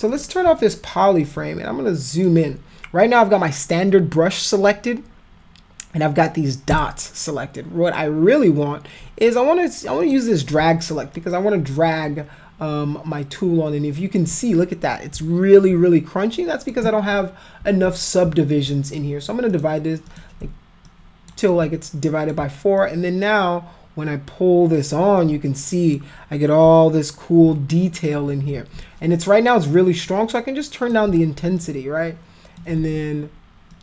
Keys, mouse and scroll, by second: 0.1 click, 1.3-2.3 alt+drag, 6.8 click, 10.0 click, 11.2 alt+click, 12.1-14.2 alt+drag, 15.6-16.7 alt+drag, 17.6 ctrl+z, 18.5 alt+click, 19.5 click, 20.1 click, 20.9 alt+click, 21.5 alt+click, 22.8-24.8 alt+drag, 25.2 alt+click, 28.5 ctrl+z, 30.1 click, 31.6 alt+click, 32.8 ctrl+z, 33.7 click.